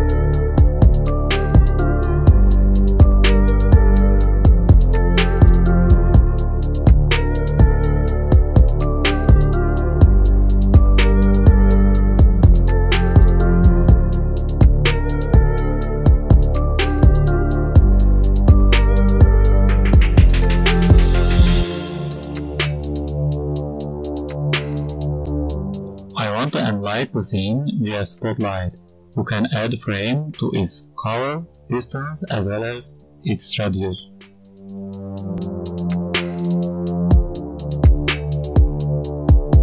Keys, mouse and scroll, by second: 0.4-1.0 scroll down 5, 0.9 click, 1.0 click, 1.6 d, 1.9 click, 2.0 click, 2.6 g, 2.9 shift+a, 4.6 shift+a, 6.1 click, 7.9-8.9 scroll up 2, 8.1 right click, 8.9-9.4 scroll up 3, 9.3 click, 11.0 click, 11.4 click, 16.3 click, 18.3 click, 19.4-20.9 scroll down 8, 19.8 click, 19.9 click, 20.9-21.3 scroll down 1, 21.3 click, 22.5 right click, 24.0 click, 24.8 click, 25.1-25.7 scroll down 6, 25.4 right click, 25.7-26.2 scroll up 3, 26.2 shift+a, 28.3-28.9 scroll down 5, 28.6 right click, 28.9 g, 29.6 right click, 29.9 r, 30.4 right click, 31.2 g, 31.7 right click, 32.8 click, 34.8 right click, 35.5 g, 36.0 right click, 36.4 KP_3, 37.0 r, 37.5 right click, 38.3-38.6 scroll up 1, 38.6 click.